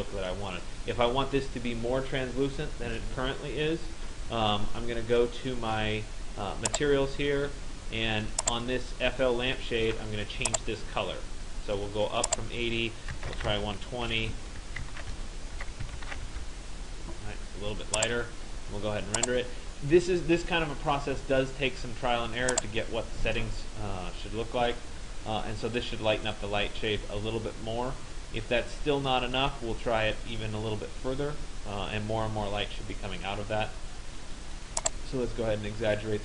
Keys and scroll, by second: 12.9-16.9 typing, 14.5 Tab.